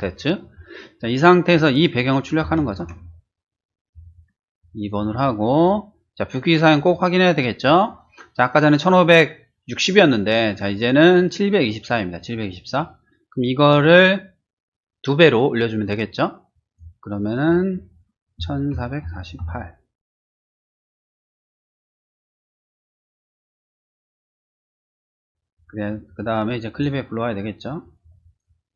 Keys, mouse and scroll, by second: 2.4 ctrl+shift+a, 3.9 click, 4.6 click, 5.0 typing, 5.6 click, 6.8 click, 16.7 click, 17.1 click, 17.8-18.5 typing, 19.9 click, 20.3 click, 21.0 click, 21.3 3, 22.0 click, 22.7 click, 23.5 click, 25.2 click, 26.1 click, 28.0 click.